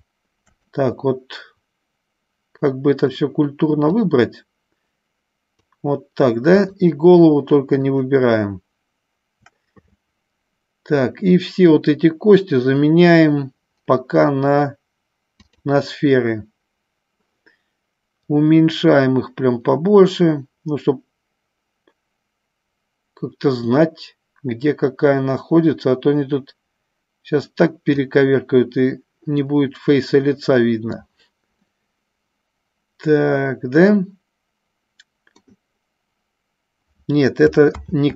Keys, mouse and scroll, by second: 0.9-3.4 middle drag, 4.3-5.9 drag, 6.8 shift+click, 8.2 shift+click, 15.7 click, 18.3-29.0 drag, 29.8-31.4 middle drag, 32.0-35.9 middle drag.